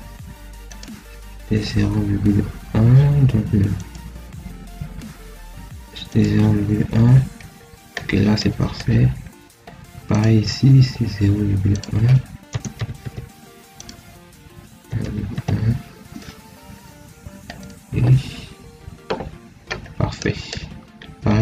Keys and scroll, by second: 12.4 0, 12.6 ., 12.9 1, 14.6 0, 14.9 ., 15.2 1.